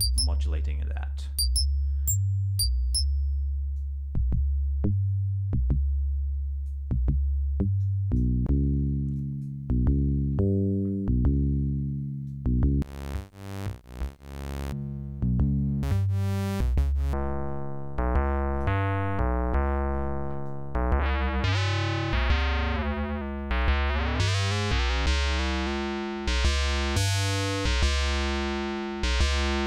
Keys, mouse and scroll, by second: 3.8-6.9 drag, 7.8 click, 9.2 click, 12.3-18.8 drag, 20.5-22.6 drag, 22.7-23.4 scroll down 4, 23.9-24.7 scroll up 2, 24.8-25.1 scroll up 2, 25.4-25.9 scroll up 4, 29.1-29.6 drag.